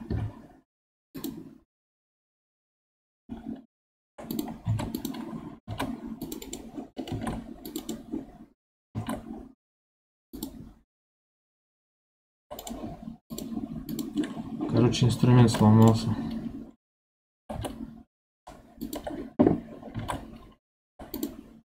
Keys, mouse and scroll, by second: 0.0 KP_7, 1.1 click, 4.2 click, 4.6 ctrl+Tab, 5.6 ctrl+r, 7.0 ctrl+r, 8.8 ctrl+r, 13.2-15.3 drag, 15.3 ctrl+r, 17.3 g, 19.9 ctrl+r.